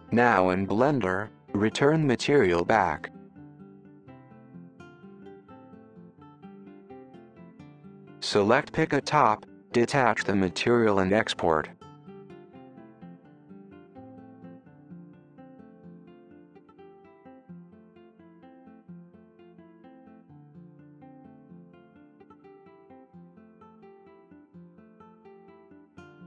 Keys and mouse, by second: 1.8 super+z, 4.5 super+z, 6.6 click, 7.6 click, 9.4 click, 11.8-16.8 drag.